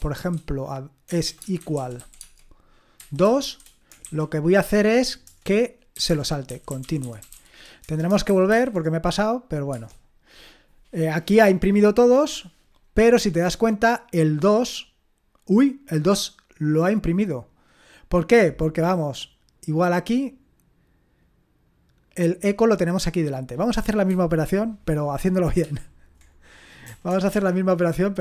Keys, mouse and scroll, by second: 1.3-4.0 typing, 5.2-8.5 typing, 9.7 typing, 14.5-16.6 drag, 17.2 click, 23.6 click, 25.6 ctrl+p, 26.9 BackSpace, 27.1 BackSpace, 27.3-28.2 BackSpace.